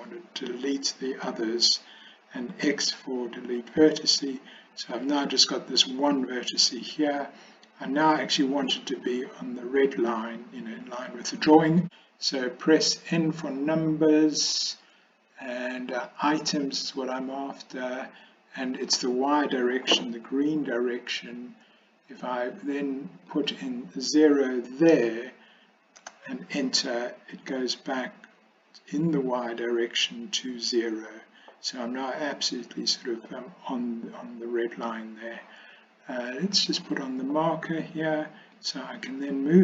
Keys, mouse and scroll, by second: 2.6 x, 5.2 click, 11.8 n, 23.4-26.4 drag, 36.6 click, 38.7-39.6 drag.